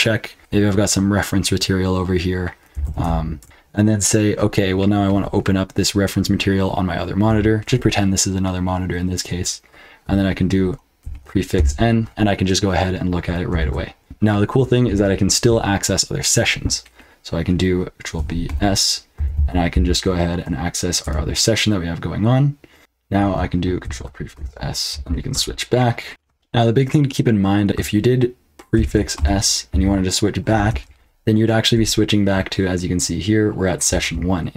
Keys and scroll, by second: 2.5-3.3 typing, 3.4 Return, 4.5-5.2 typing, 11.0 ctrl+b, 11.5 n, 13.5 ctrl+b, 14.0 p, 18.1 ctrl+b, 18.4-20.2 typing, 21.0 Return, 22.8 typing, 23.8 ctrl+b, 24.3-26.0 typing, 26.1 super+l, 26.1 super+h, 26.1 F12, 27.6 BackSpace, 28.7 ctrl+b, 29.1 s, 29.7 j, 30.7 Return.